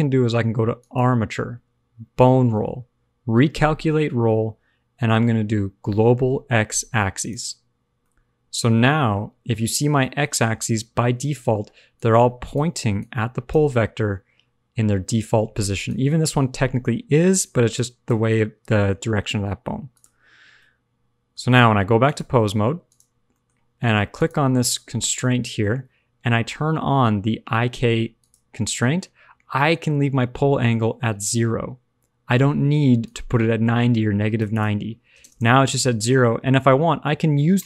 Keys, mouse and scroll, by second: 0.7 click, 7.8-9.3 scroll up 3, 9.3 middle click, 9.9 shift+middle click, 11.6 d, 11.9 click, 12.5-12.8 d, 12.9 click, 13.5 d, 13.6 d, 13.7-14.6 scroll down 3, 14.6-14.9 scroll up 3, 15.2 d, 15.8 d, 15.9 click, 17.3-17.7 d, 17.7 click, 18.0 d, 19.9 click, 20.5 middle click, 21.4-22.0 scroll up 2, 22.0 click, 23.1 scroll down 1, 23.2 middle click, 24.1 click, 25.1 shift+middle click, 31.1 scroll down 1, 31.2 middle click, 33.0 click, 34.4 click, 36.1 shift+middle click, 36.3-37.3 scroll down 2, 37.3 click, 37.3 scroll down 1.